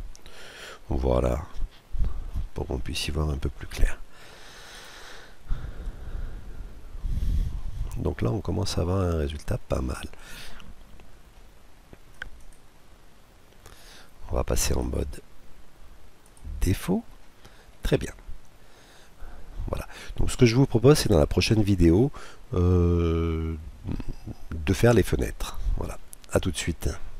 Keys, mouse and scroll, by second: 2.4-4.2 middle drag, 4.4-6.1 right drag, 5.4 KP_Decimal, 6.8-11.9 middle drag, 11.9-12.3 scroll down 1, 15.8 click, 16.6-17.1 scroll down 2, 16.7 middle click, 17.1-19.0 middle drag, 21.6-23.3 middle drag.